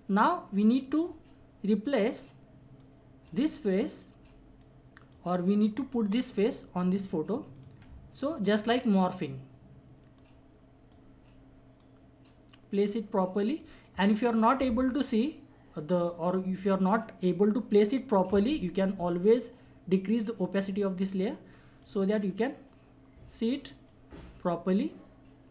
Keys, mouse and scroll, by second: 20.3-22.6 drag, 22.7-25.5 drag.